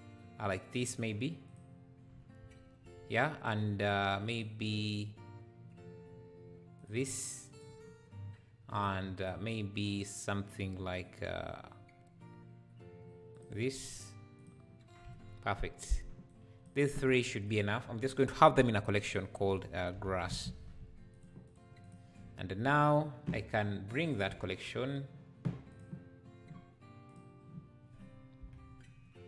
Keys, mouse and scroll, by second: 5.7-6.9 drag, 16.3 click, 21.1 s, 27.1 click.